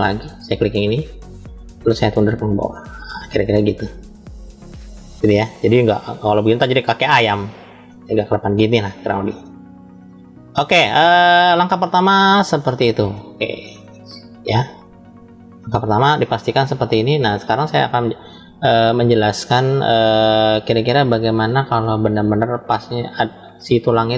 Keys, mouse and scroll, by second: 0.8 click, 1.9-3.7 drag, 4.0 scroll up 1, 4.1-5.5 middle drag, 5.8-8.3 drag, 8.6-9.9 middle drag, 9.9 scroll down 1, 10.5 middle click, 11.7 middle click, 12.3 scroll down 2, 13.0 shift+middle click, 13.6 middle click, 14.7 shift+middle click.